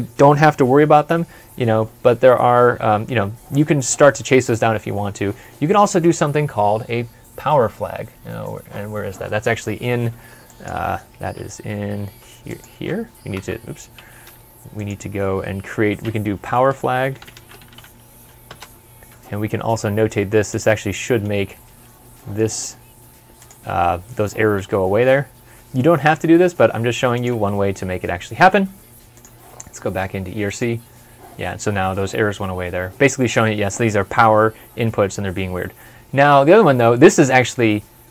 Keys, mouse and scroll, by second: 11.1 typing, 13.0 Escape, 14.1 typing, 16.3-18.1 typing, 18.3 Return, 20.8 Return, 20.8 middle click, 21.5 c, 22.0 middle click, 24.6 middle click, 25.7 middle click, 25.8 ctrl+s, 27.2 ctrl+s.